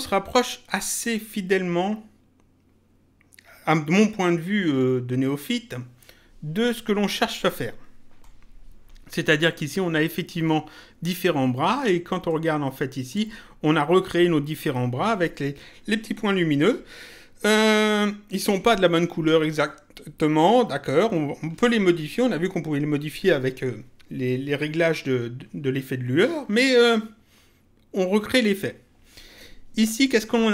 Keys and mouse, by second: 12.2 click, 19.5 click.